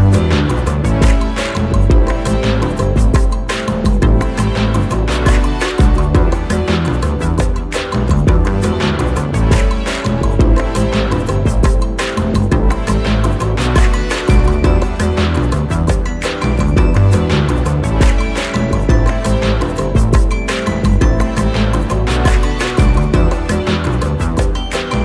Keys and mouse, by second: 1.8 alt+shift+Num_Lock, 1.9-3.5 alt+shift+drag, 5.7 click, 9.6 click, 11.5 shift+click, 13.7 click, 17.1-19.8 drag, 22.6 click, 24.7-25.0 drag.